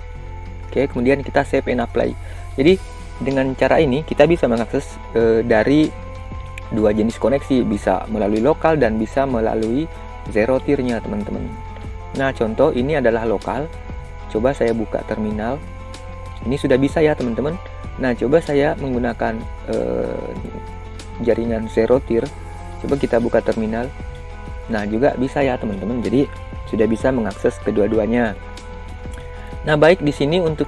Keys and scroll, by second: 0.5 ctrl+v.